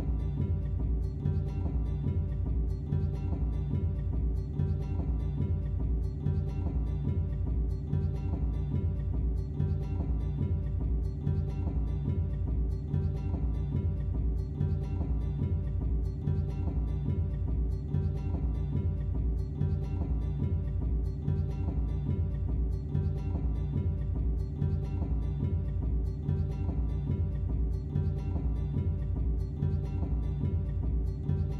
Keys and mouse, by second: 1.5 click, 1.9 click, 2.5 click, 2.9 a, 3.2 i, 3.5 drag, 3.7 ctrl+shift+v, 5.0-6.9 drag, 10.3-31.5 drag.